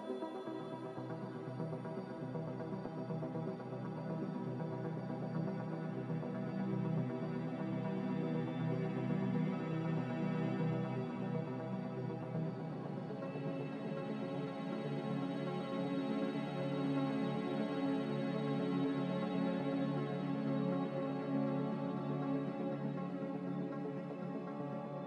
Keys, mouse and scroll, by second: 2.7 b, 10.1-11.0 typing, 12.0 b, 12.8 Delete, 15.2 click, 16.0 click, 18.4 m, 19.6-20.4 typing, 22.3 ctrl+b.